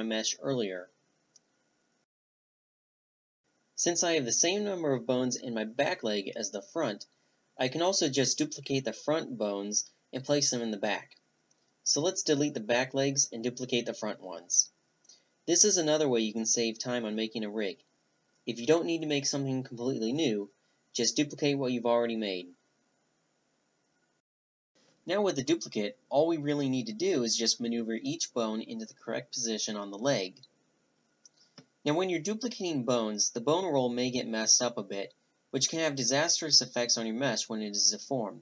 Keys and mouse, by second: 0.1 click, 0.5 click, 0.6-2.0 right drag, 2.0 middle click, 2.3 click, 2.5 middle click, 3.3 right click, 5.1-8.0 typing, 5.6 Delete, 6.4 right click, 6.6 Delete, 7.4 middle click, 8.5 click, 9.4 shift+d, 9.9 click, 10.9 a, 10.9-13.1 drag, 13.2 middle click, 14.1-15.2 right drag, 16.0-17.2 middle drag, 16.2 a, 16.6 b, 17.2-17.6 drag, 17.6 middle drag, 18.3 middle click, 18.8 middle click, 19.5-20.2 middle drag, 20.7-21.0 drag, 21.0 z, 21.7 click, 22.2 z, 22.5 right click, 23.3 right click, 23.6 middle click, 23.8-25.2 right drag, 24.1 click, 25.2 middle click, 25.8 a, 25.9 b, 26.2 middle click, 26.6 click, 26.9 a, 28.3 z, 28.5-30.0 middle drag, 30.0-30.6 right drag, 30.6-33.5 drag, 34.3 click, 35.0-36.6 drag, 35.1-36.5 middle drag, 36.7-38.4 middle drag.